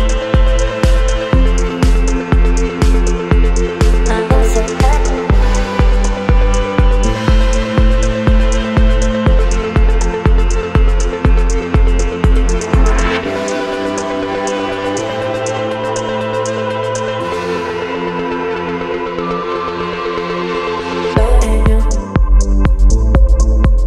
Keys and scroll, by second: 0.0 space, 3.5 Delete, 6.6 Delete, 7.3 space, 9.1 space, 11.1 space, 12.6 Delete, 13.5 Delete, 14.3 Delete, 15.6 Delete, 17.0 Delete, 17.7 space, 20.1 space, 21.5 Delete.